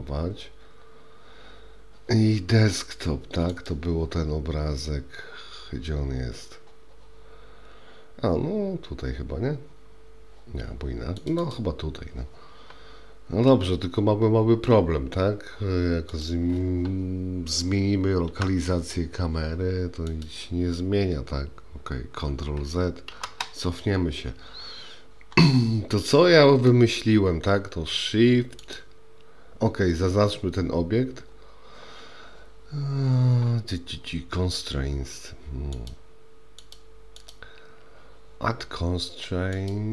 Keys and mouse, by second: 13.5-14.7 middle drag, 16.1 click, 18.3 g, 23.2 ctrl+z, 26.8-27.5 middle drag, 35.8 click, 39.7-39.9 drag.